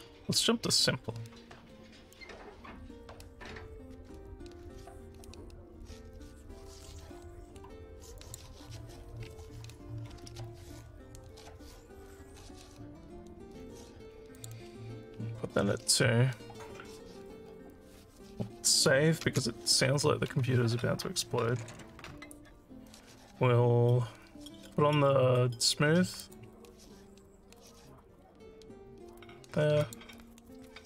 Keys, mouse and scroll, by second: 8.2 click, 14.4 click, 19.3 ctrl+s, 26.2 click, 29.9 click.